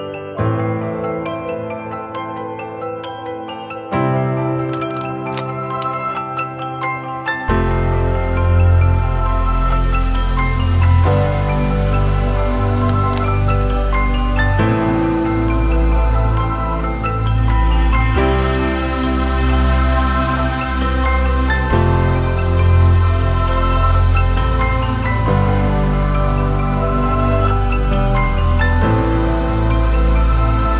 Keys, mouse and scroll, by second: 0.4 scroll up 1, 0.7 scroll down 1, 0.8 scroll up 1, 3.8 ctrl+-, 16.1 ctrl+t, 17.2 alt+shift+click, 21.3 alt+shift+click, 24.0-24.4 alt+scroll up 2.